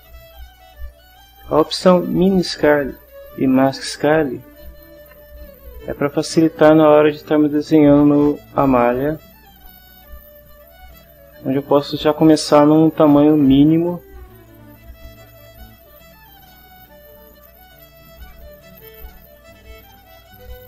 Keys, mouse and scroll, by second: 6.2 click, 15.5-20.6 right drag.